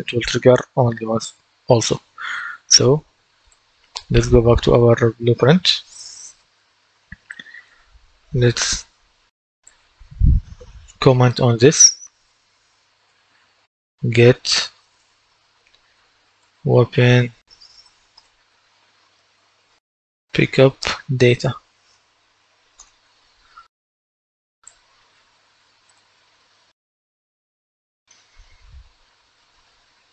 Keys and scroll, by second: 11.5 c, 12.6-13.5 typing, 14.9 space, 16.1-22.6 typing, 22.6 Return.